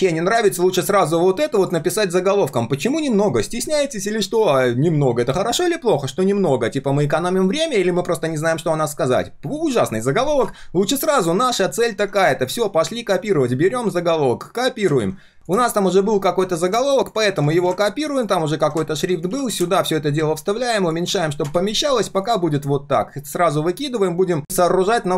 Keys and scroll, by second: 1.8 ctrl+z, 11.6 ctrl+z, 15.0 ctrl+c, 18.5 ctrl+shift+v, 19.3 ctrl+a, 19.5 ctrl+v, 20.3 ctrl+a.